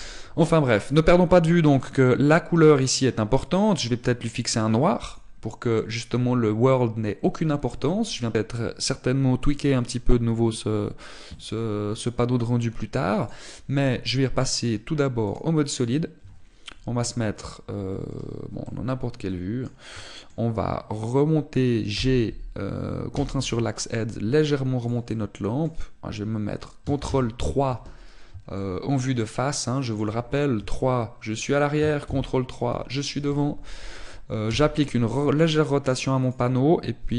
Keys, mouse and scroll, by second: 2.9 click, 3.6 click, 14.5 click, 15.5 click, 19.6 middle click, 21.0 shift+middle click, 22.9 g, 25.9 click, 26.1 middle click, 28.0 ctrl+KP_3, 29.5 shift+middle click, 31.5 KP_3, 33.0 ctrl+KP_3, 35.5 r.